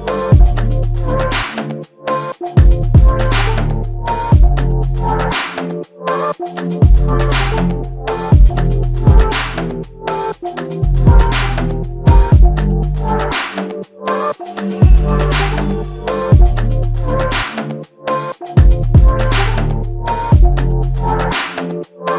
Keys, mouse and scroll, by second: 2.1 alt+click, 16.1 click.